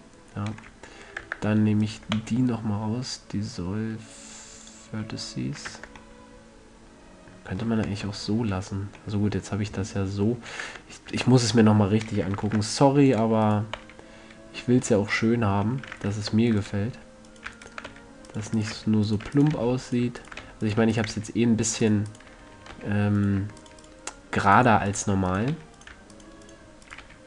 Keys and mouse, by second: 0.1 Tab, 1.6 Tab, 2.5 x, 6.1 Tab, 8.2 Tab, 11.1 Tab, 11.5 Tab, 12.8 ctrl+Tab, 13.8-15.5 right drag, 14.1 x, 16.5 ctrl+Tab, 17.6-19.9 drag, 18.3-21.5 typing, 20.0 click, 23.1 f, 24.1 shift+click, 25.9 f.